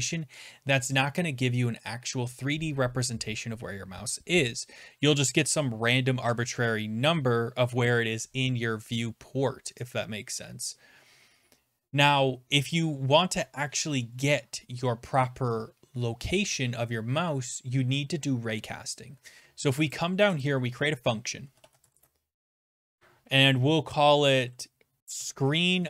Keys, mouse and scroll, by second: 13.7 BackSpace, 17.1 middle click, 20.0 click, 20.5 click, 21.2-22.3 typing, 21.8 scroll, 24.7-25.8 typing.